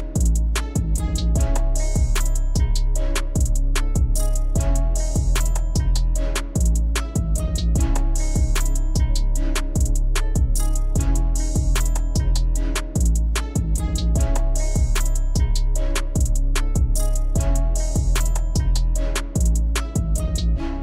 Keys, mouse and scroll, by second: 1.2 click, 2.9-3.5 drag, 7.4 click, 10.8 click, 15.4-16.0 drag, 17.6 Delete.